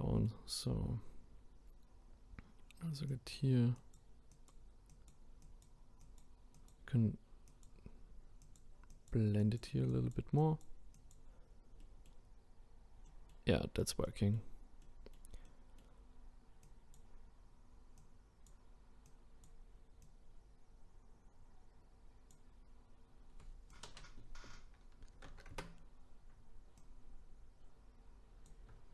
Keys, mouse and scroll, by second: 2.0-3.1 scroll up 1, 3.1-11.8 drag, 11.8-12.5 middle drag, 12.5-13.0 scroll up 1, 13.0-13.7 middle drag, 13.7-14.0 scroll down 2, 14.0-16.7 middle drag, 16.7-23.0 drag, 23.7-28.9 drag.